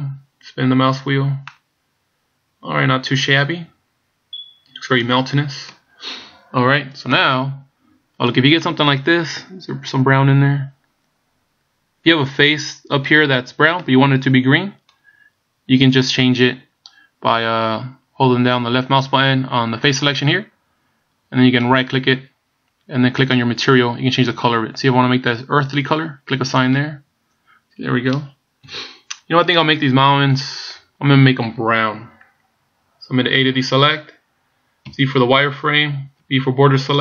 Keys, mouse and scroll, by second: 0.5 scroll up 1, 1.1 scroll down 2, 1.6 middle click, 7.2 middle click, 8.8 middle click, 13.9 middle click, 20.1 click, 21.9 right click, 23.4 click, 26.7 click, 28.7 KP_1, 33.6 a, 34.9 z, 36.2 b.